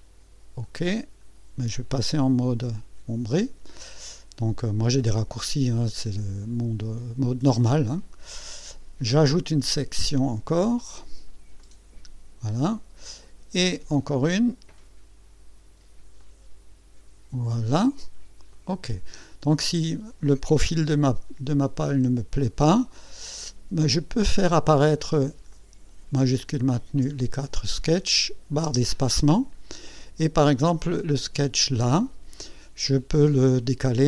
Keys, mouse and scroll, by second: 0.6 click, 9.4 click, 11.6 click, 14.1 click, 16.2 click, 18.5 click, 21.5 click, 25.0 click, 25.5 click, 26.7 shift+click, 28.6 space, 29.9 click, 31.4 click.